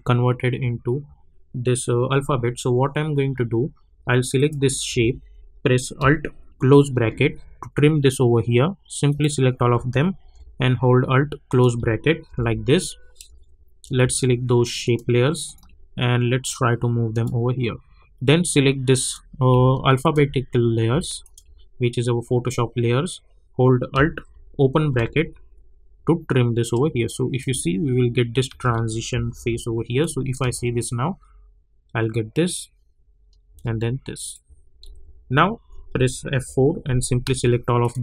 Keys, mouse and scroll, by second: 4.3 click, 4.8 =, 6.9 alt+], 9.1 click, 10.2 ], 11.4 click, 12.2 alt+], 14.8-19.0 ctrl+drag, 20.4-20.9 scroll down 1, 21.2 ctrl+click, 22.3 scroll down 1, 22.7 scroll up 1, 24.9 alt+[, 27.0 click, 27.4 space, 30.0 click, 30.4 space, 33.5 space, 34.1 click, 34.8 u, 36.4 F4, 37.2 ctrl+a, 37.8 click.